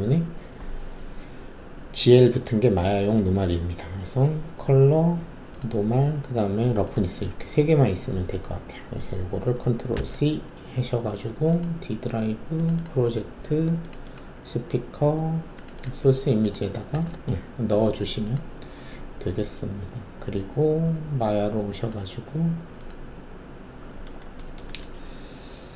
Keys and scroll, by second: 9.9 ctrl+c, 16.9 ctrl+v.